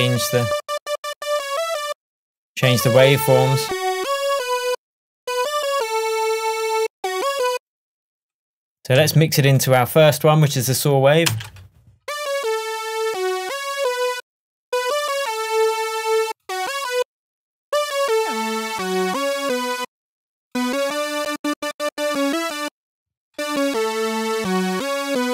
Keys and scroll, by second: 9.1 space, 11.4 space.